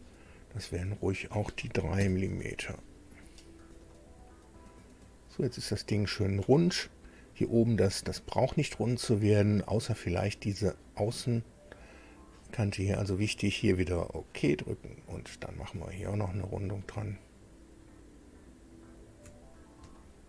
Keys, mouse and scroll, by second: 1.0 click, 2.0 KP_3, 2.2 Tab, 3.8-7.9 middle drag, 7.9 scroll up 2, 13.7 click, 15.5 click, 16.2 ctrl+click, 18.9 ctrl+click, 19.4-19.7 ctrl+scroll down 2, 19.9 shift+middle click.